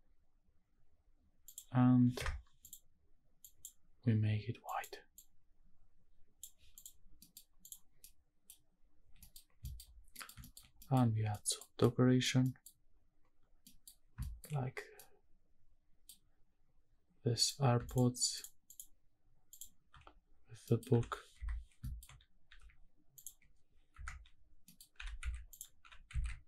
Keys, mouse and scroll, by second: 0.6-1.3 scroll up 1, 1.3 scroll up 1, 1.4 click, 2.6 click, 6.7 click, 7.0 scroll down 2, 7.2 middle click, 7.6 click, 8.0-8.4 middle drag, 8.6-8.9 scroll up 2, 8.9 scroll down 2, 9.2 middle click, 9.6 shift+middle drag, 9.9 scroll down 2, 10.2 middle drag, 10.4 shift+middle drag, 10.7 middle drag, 10.9-11.3 scroll up 2, 11.3 middle click, 11.8 middle click, 12.3 scroll down 1, 12.4 middle click, 13.6 middle click, 13.9 scroll up 2, 14.2 shift+middle drag, 14.5-14.9 scroll down 1, 14.9-16.0 middle drag, 17.4 click, 17.8 shift+click, 18.3 shift+click, 19.5 shift+click, 20.2-20.7 scroll down 1, 20.7 middle click, 20.9 scroll up 1, 21.0 g, 21.4 Escape, 21.6 scroll down 2, 21.8 shift+middle drag, 22.0-22.4 shift+scroll up 2, 22.4 g, 23.2 ctrl+click, 23.9 KP_Decimal, 24.4-24.8 scroll down 2, 24.7 middle click, 24.9 g, 25.2 z, 25.5 click, 25.8 g, 26.1 z.